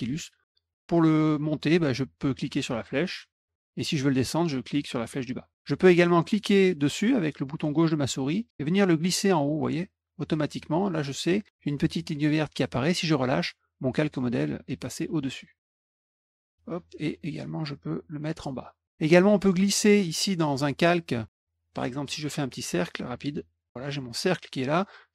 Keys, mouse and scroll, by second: 2.8 click, 5.0 click, 6.4-12.8 drag, 15.7 click, 16.5-18.4 drag, 19.3 click, 22.0 click, 22.8 ctrl+click.